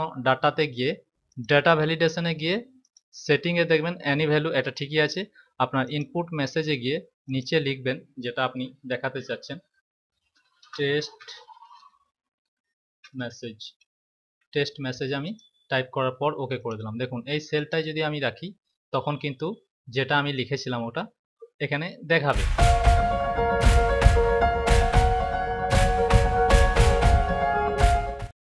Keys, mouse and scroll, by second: 1.1 click, 2.7 click, 5.7 click, 7.1 click, 10.1-13.1 typing, 15.2 click, 16.5 click.